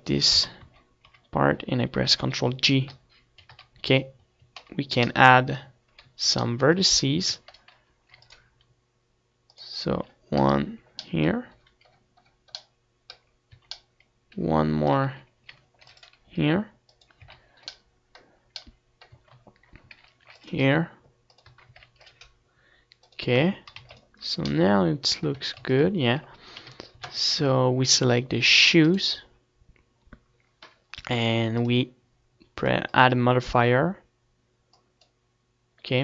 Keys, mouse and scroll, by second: 0.2-2.6 right drag, 0.8 z, 1.2 z, 2.7 ctrl+j, 3.7 z, 4.7 Tab, 7.6 a, 8.1 ctrl+r, 10.1-11.6 drag, 10.8 KP_Decimal, 13.9 a, 15.4 z, 15.9 ctrl+r, 17.5-19.0 drag, 17.5 z, 19.0 middle click, 19.5 a, 20.3 ctrl+r, 21.8-25.1 drag, 21.8 a, 22.2 ctrl+r, 23.8 Tab, 24.1 ctrl+s, 25.5 a, 25.9 ctrl+s, 26.8 KP_7, 27.2 z, 27.7 c, 29.2 right click, 33.5-34.8 drag.